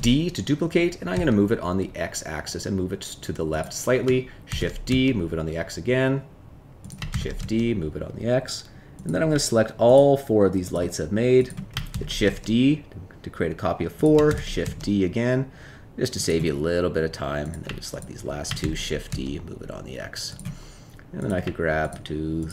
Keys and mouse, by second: 1.1 x, 4.4 shift+d, 4.8 x, 7.1 shift+d, 7.3 x, 9.8 shift+click, 10.7 shift+click, 11.3 shift+click, 11.9 shift+d, 12.2 x, 14.2 shift+d, 14.6 x, 17.8 shift+click, 18.6 shift+d, 19.0 x, 20.2 click, 21.1 click.